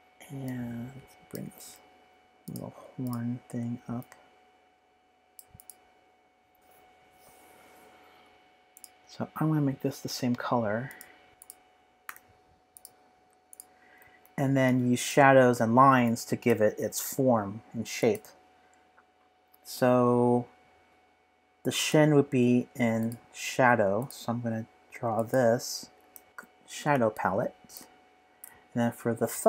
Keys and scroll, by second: 11.3 BackSpace, 11.3 v, 12.1 i, 27.6-28.9 typing.